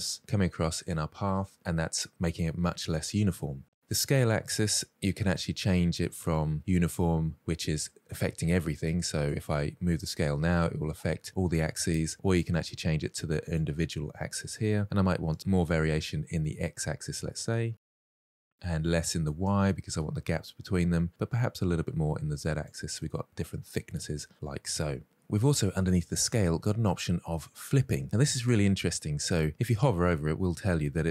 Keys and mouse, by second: 9.2-12.4 drag, 13.3 click, 15.1-17.4 drag, 17.7-19.0 drag, 21.3 click, 22.4-24.7 middle drag.